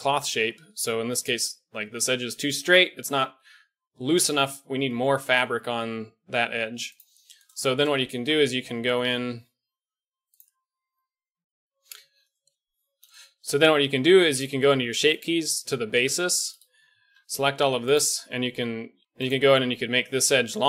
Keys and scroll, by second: 0.6 d, 1.2-5.4 d, 8.1 Tab, 9.2 Tab, 13.1 shift+Left, 15.9 Tab, 16.7 a, 17.0 a, 19.0 s, 19.5 g.